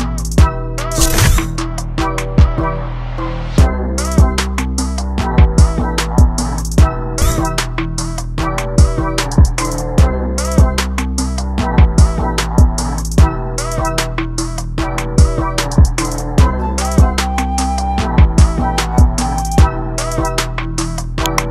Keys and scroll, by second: 4.6 ctrl+0, 14.5 ctrl+t.